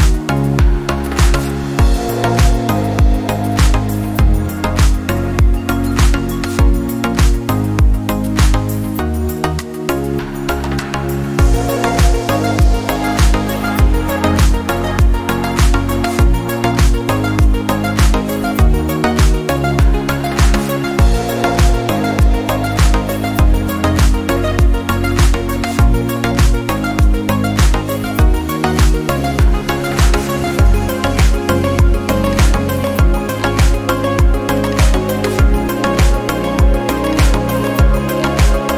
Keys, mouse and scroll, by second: 0.1 drag, 0.4 drag, 0.6 click, 0.8 click, 0.9 click, 1.1 click, 1.3 drag, 1.5 drag, 1.8 click, 2.1-2.4 drag, 2.5 click, 2.6 click, 2.8 drag, 3.0 click, 3.2 click, 3.5 shift+click, 3.7 click, 3.8 click, 4.1 click, 4.4 click, 4.7 middle click, 4.9 click, 5.0 click, 5.4 -, 5.6 click, 5.9 alt+click, 6.3 click, 6.6 -, 6.8 click, 7.0 click, 7.0 -, 7.6 click, 7.8 click, 8.1 drag, 8.3 drag, 8.4 click, 8.8 click, 9.0 click, 9.3 drag, 9.6 drag, 9.8 click, 10.0 click, 10.2 drag, 10.6 click, 10.9 click, 11.4 click, 11.5 click, 11.8 click, 12.1 drag, 12.5 click, 12.7 click, 13.1 drag, 13.3 click, 13.5 click, 13.9 click, 14.2 drag, 14.5 click, 15.0 click, 15.2 click, 15.6 ctrl+d, 15.7 shift+click, 15.9 click, 16.0 click, 16.2 click, 16.8 click, 16.9 click, 17.0 click, 17.4 click, 17.8 click, 17.9 click, 18.2 click, 18.3 scroll down 2, 18.5 click, 18.8 click, 19.1 drag, 19.6 click, 19.8 click, 20.0 drag, 20.3 drag, 20.4 click, 20.7 click, 21.1 click, 21.3 drag, 21.5 click, 21.8 click, 22.3 click, 22.7 click, 23.2 click, 23.4 click, 23.8 click, 23.9 middle click, 24.1 click, 24.3 click, 24.8 click, 25.1 Delete, 25.2 click, 25.7 click, 26.1 click, 26.6 click, 27.1 click, 27.5 click, 27.9 click, 28.3 click, 28.6 click, 29.3 click, 29.3 -, 29.4 click, 29.7 click, 29.8 click, 30.2 click, 30.3 click, 30.6 click, 30.8 click, 31.0 click, 31.4 click, 31.5 click, 31.9 click, 32.0 -, 32.1 click, 32.4 click, 32.7 click, 32.9 click, 33.0 click, 33.3 middle click, 33.5 middle click, 34.1 click, 34.8 click, 35.4 click, 35.7 click, 36.0 click, 36.4 click, 36.7 shift+click, 37.0 click, 37.2 click, 37.5 click, 37.7 click, 37.7 -, 38.1 click, 38.3 click, 38.5 click.